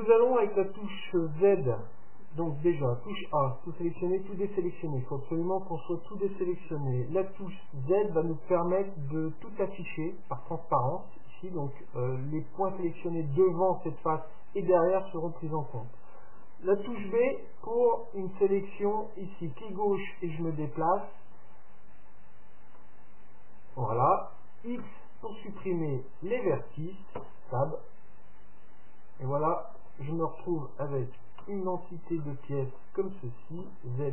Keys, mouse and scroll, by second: 2.7 a, 4.0 a, 7.4 z, 17.0 b, 24.8 x, 27.2 Tab, 27.7-29.6 middle drag, 31.4 KP_Decimal, 32.2-34.1 middle drag, 33.6 z.